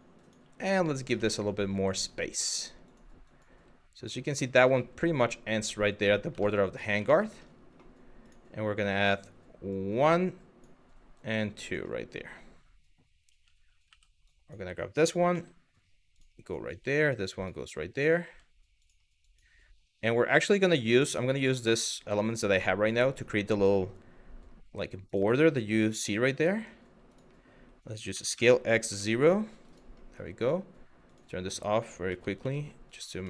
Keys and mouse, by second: 0.6 click, 0.9 middle click, 1.4 click, 2.5 click, 3.0 click, 3.1 g, 3.9 click, 4.3 click, 4.4 g, 5.5 click, 6.1 middle click, 6.7 middle click, 7.9 click, 9.3 click, 10.8 click, 12.9 1, 13.5 w, 13.9 click, 14.9 g, 15.8 click, 16.3 g, 17.0 click, 17.7 click, 19.0 click, 20.1 click, 20.5 click, 20.6 g, 21.3 click, 21.6 click, 22.0 g, 22.7 click, 23.2 click, 23.3 g, 24.7 click, 25.1 click, 26.7 click, 27.7 s, 28.0 x, 29.3 click, 30.7 click, 31.7 g, 32.0 x, 32.5 click, 33.0 shift+middle click.